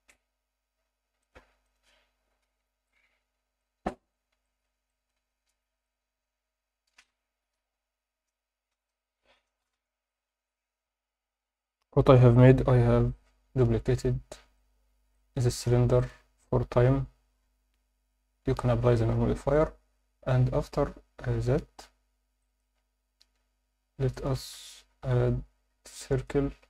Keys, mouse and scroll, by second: 3.2 alt+a, 3.6-4.1 alt+middle drag, 4.4 alt+shift+middle drag, 4.9 ctrl+middle drag, 5.8 click, 10.7 F9, 10.8 F10, 10.8 click, 10.8 shift+middle click, 15.1 alt+middle click, 16.0 click, 16.8 KP_7, 22.4 alt+shift+middle click, 24.1 shift+right click, 24.5 shift+a.